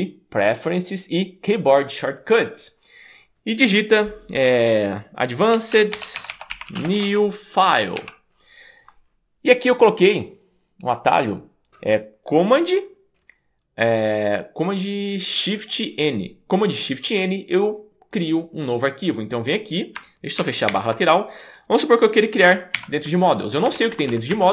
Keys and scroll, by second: 5.4-8.0 typing, 20.4 super+k, 20.7 super+b, 22.8 shift+super+., 23.9 alt+Left.